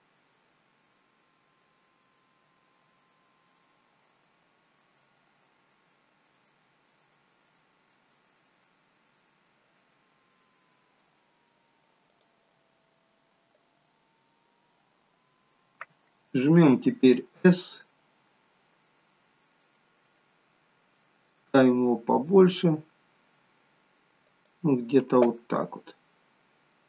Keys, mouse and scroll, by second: 13.5-14.3 scroll up 8, 15.0-16.1 scroll down 3, 16.6 scroll down 2, 17.2 s, 26.1-26.7 scroll up 7, 26.7-26.8 scroll down 2.